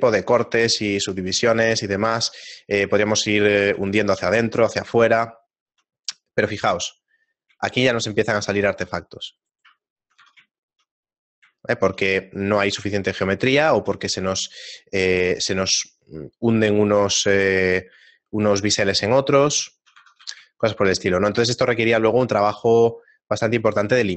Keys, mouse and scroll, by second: 0.8 right click, 0.9 shift+middle click, 2.1 Tab, 3.0 Tab, 4.2 shift+middle click, 6.1 scroll up 1, 7.2 scroll up 7, 7.6 scroll down 1, 8.3 scroll down 1, 9.0-9.4 scroll down 1, 9.4 right click, 9.8 shift+middle click, 10.2 Tab, 10.6 shift+middle click, 11.2 middle click, 11.8 shift+middle click, 12.8 shift+middle click, 15.0 middle click, 16.6 middle click, 17.3 shift+middle click, 17.9 middle click, 18.1 ctrl+middle click, 19.0 shift+middle click, 20.2 a, 20.8 shift+middle click, 22.1 scroll down 2, 22.4 shift+middle click, 22.7 right click, 23.0-23.5 scroll up 1, 23.6 a.